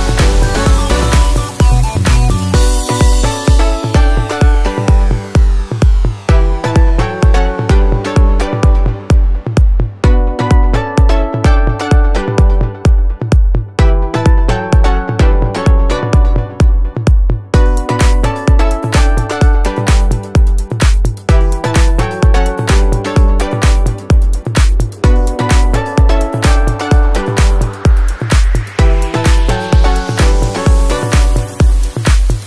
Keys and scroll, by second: 25.2 ctrl+a.